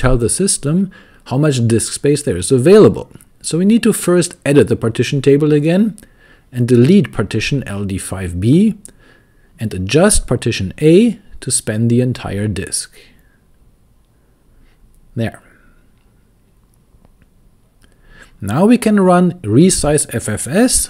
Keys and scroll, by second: 0.0-2.0 typing, 4.6 ctrl+d, 5.1 ctrl+d, 6.0 k, 8.2-10.9 typing, 13.5 super+c, 13.9 super+v, 15.1 Escape, 15.3-16.6 typing, 17.3 Return, 20.0-20.8 typing.